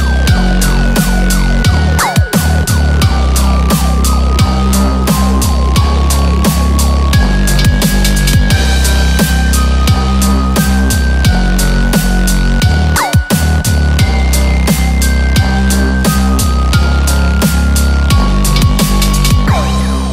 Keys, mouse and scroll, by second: 0.1 KP_7, 0.6 scroll down 3, 0.9 shift+middle click, 1.1 scroll up 6, 1.5 shift+middle click, 2.1 1, 2.3 click, 2.9-3.3 scroll down 7, 4.3 scroll up 2, 4.7 click, 5.5 x, 6.6 click, 7.0 x.